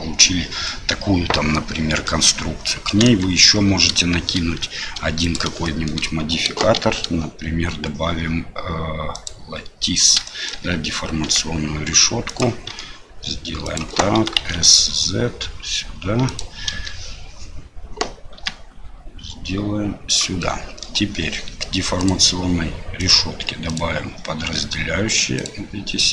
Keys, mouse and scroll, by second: 0.6-2.1 middle drag, 3.0 KP_1, 5.3 click, 5.6 shift+middle click, 6.7 shift+a, 10.2 shift+middle drag, 12.7 s, 14.1 s, 16.7 KP_7, 18.4 g, 20.4 middle click, 22.0 click, 23.0 click.